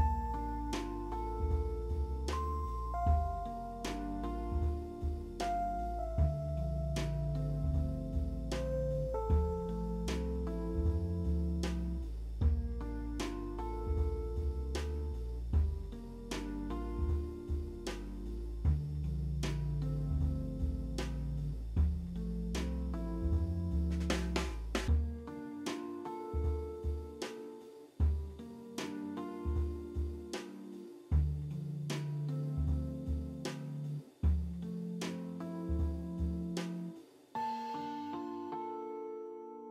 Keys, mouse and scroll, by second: 8.1 5, 8.1 Return, 9.3 scroll down 1, 11.2 middle click, 18.6 ctrl+d, 18.8 c, 19.4 double click, 21.3 alt+w, 21.7 c, 22.4 double click, 23.2 double click, 24.7 c, 25.2 double click, 25.4 c, 30.8-31.8 typing, 31.0 Tab, 35.9 alt+w, 37.0 p, 37.4 alt+middle click, 37.8 scroll down 2, 38.7 alt+middle click.